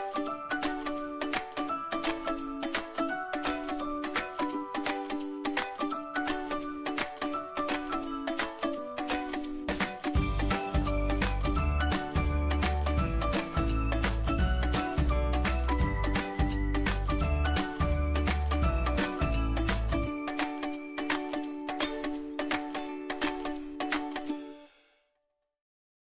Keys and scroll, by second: 4.9 ctrl+g.